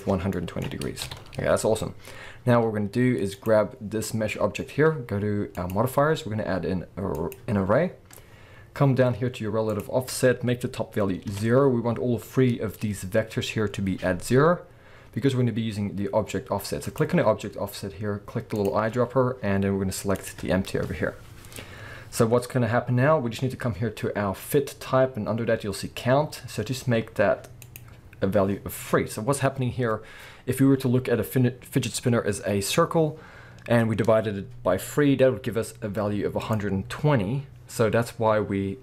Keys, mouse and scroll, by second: 0.3-1.1 middle drag, 1.1 KP_7, 2.2-3.4 scroll down 2, 3.4 click, 5.6-17.0 drag, 11.3 Return, 18.5 click, 27.6-36.5 drag, 28.8-30.9 scroll down 2, 30.9-32.1 scroll up 2, 32.1-35.1 scroll up 1.